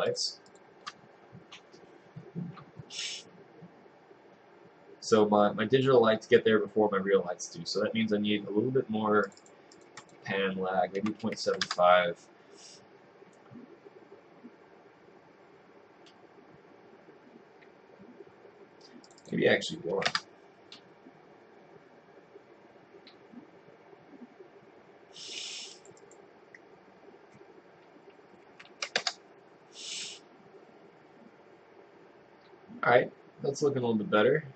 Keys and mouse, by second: 11.7 Return, 20.2 Return, 29.1 Return.